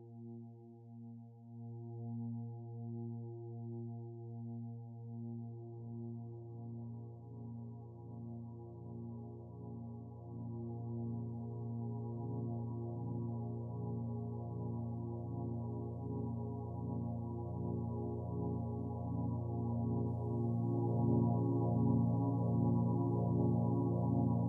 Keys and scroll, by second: 17.4 ctrl+z, 18.2-19.3 typing.